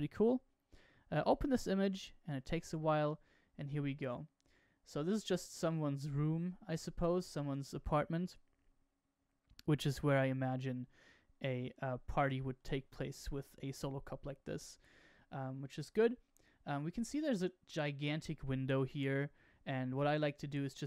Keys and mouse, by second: 3.2-6.4 middle drag, 7.4-12.4 middle drag, 13.5-15.7 middle drag, 16.7-17.3 middle drag, 17.4-20.7 middle drag.